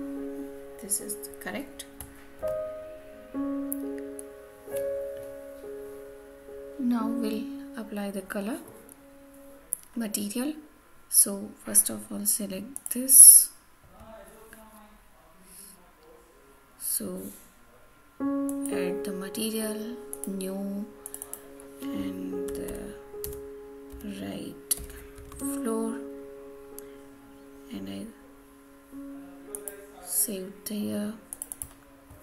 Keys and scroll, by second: 25.2 Return.